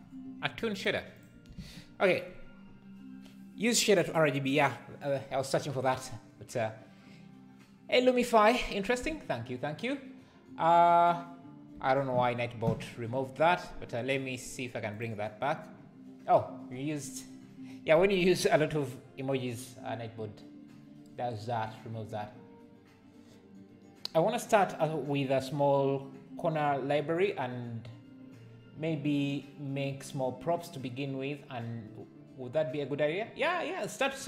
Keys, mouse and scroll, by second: 1.2 click, 1.6 ctrl+s.